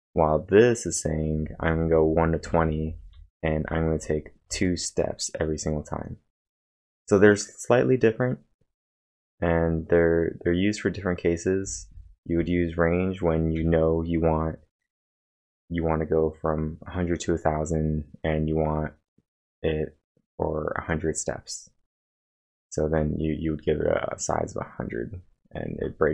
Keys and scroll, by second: 3.5-4.5 typing, 6.7 k, 11.4-12.1 typing, 13.6 o.